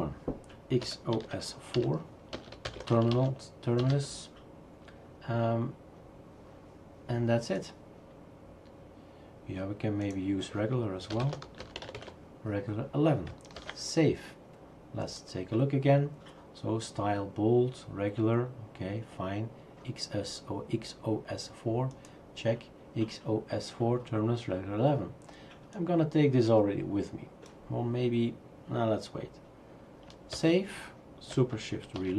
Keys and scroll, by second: 0.6-4.4 typing, 11.0-12.4 typing, 13.6 ctrl+s, 30.3 ctrl+s, 32.0 shift+super+r.